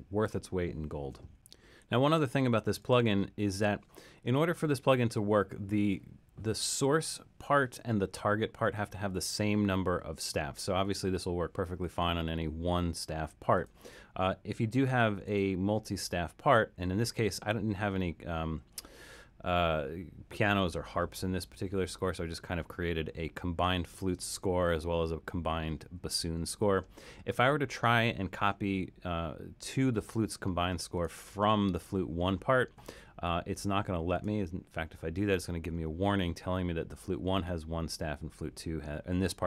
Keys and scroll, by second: 15.1 alt+super+., 24.3 alt+super+., 26.0 alt+super+,.